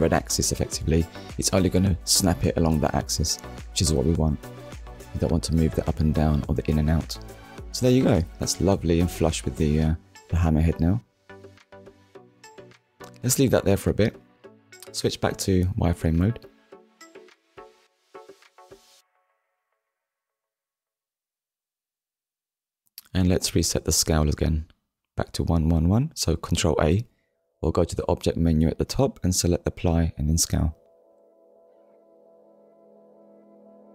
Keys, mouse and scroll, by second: 0.8 click, 6.6 middle click, 7.7 scroll down 1, 8.4 middle click, 9.3 KP_1, 10.1 scroll down 1, 10.7 shift+middle click, 15.6 click, 16.6 click, 17.4 scroll up 1, 18.1 shift+middle click, 18.9 click, 20.5-20.9 scroll up 2, 21.0 shift+middle click, 25.4 ctrl+a, 27.1 click, 32.9 Tab.